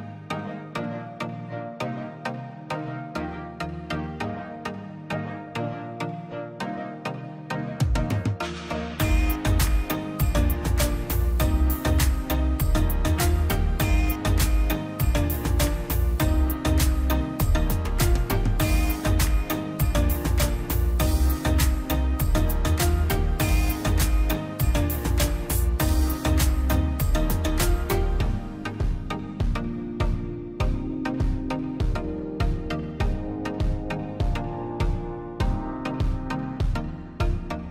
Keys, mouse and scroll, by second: 1.6 scroll down 1, 2.1 click, 2.7 scroll up 1, 3.2 click, 4.3 scroll up 1, 5.0 click, 5.7 scroll down 1, 6.9 click, 7.1 scroll down 1, 7.8 click, 8.0 scroll up 1, 8.3 click, 10.0 scroll up 1, 10.2 click, 14.0 scroll down 1, 14.2 scroll up 1, 14.4 click, 15.0 scroll up 1, 15.5 click, 16.4 scroll down 1, 16.5-16.8 scroll up 1, 16.8 click, 17.7 scroll down 1, 17.9-18.2 scroll up 1, 18.2 click, 18.7 scroll down 1, 18.8 scroll up 1, 19.1 click, 20.4 scroll down 1, 20.6 scroll up 1, 21.1 click, 25.1 scroll down 1, 25.9 click, 27.3 Escape, 27.7-28.2 scroll up 2, 27.9 click, 28.3 click, 29.3 ctrl+z, 29.8-30.2 scroll up 1, 30.9 middle click, 31.3 scroll up 1, 31.6 click, 32.1 scroll up 1, 32.3 click, 34.3 space, 35.2 click, 35.9-36.3 scroll down 1, 36.3 middle click, 36.7 click, 36.9-37.7 scroll down 1.